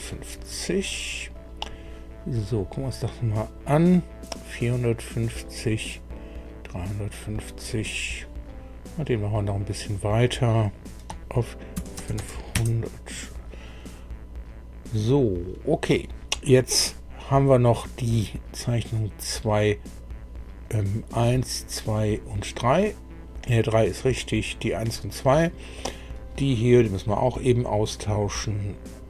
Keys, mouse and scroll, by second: 3.1 click, 5.6 click, 7.7 click, 10.7 click, 11.7 KP_5, 12.0 KP_0, 12.5 KP_Enter, 12.5 KP_0, 18.6 click, 20.6 click, 21.3 click, 22.1 click, 24.9 click, 25.7 click, 27.3-27.7 scroll up 1, 28.9 click.